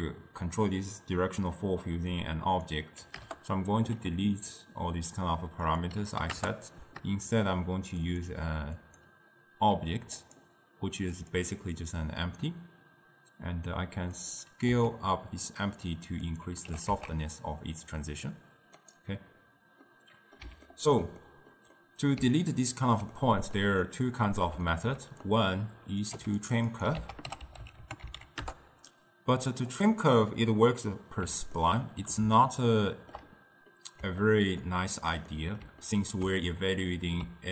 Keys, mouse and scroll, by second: 2.5-5.7 drag, 5.7-8.3 drag, 8.8 click, 10.3 click, 14.2 click, 15.1 s, 16.8 g, 19.9-25.3 middle drag, 25.3-26.2 drag, 26.2 g, 26.8 click, 27.0 ctrl+a, 31.6-37.3 ctrl+middle drag, 37.3 d.